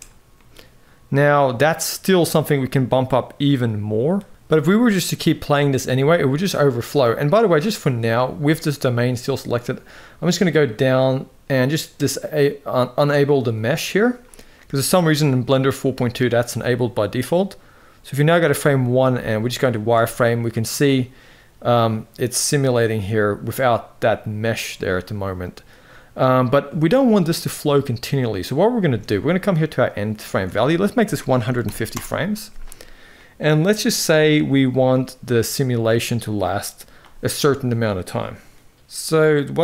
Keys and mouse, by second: 0.0-3.7 middle drag, 5.3 middle click, 13.3 click, 14.2 middle click, 17.2-18.0 drag, 18.4 middle click, 18.7 z, 19.6 space, 20.2 middle click, 28.7 space, 29.5-31.6 drag, 32.9 middle click.